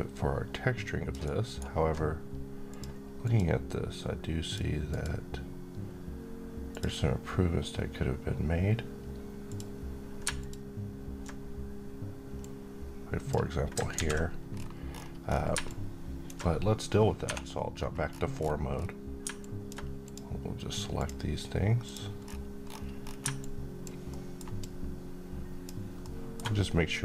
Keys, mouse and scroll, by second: 1.1-2.6 alt+right drag, 2.6 click, 8.8 click, 9.4 click, 12.3-13.2 drag, 13.8 z, 14.4-14.8 scroll down 1, 14.8-15.5 scroll up 1, 15.5-16.2 drag, 16.9 scroll up 1, 17.1 4, 17.6-18.0 scroll up 1, 18.0 scroll down 1, 19.3 alt+click, 22.1 scroll down 1, 22.5-23.3 scroll up 1, 23.3-23.9 click, 24.0 alt+middle click, 24.5-25.7 alt+drag, 25.9-26.5 alt+middle click.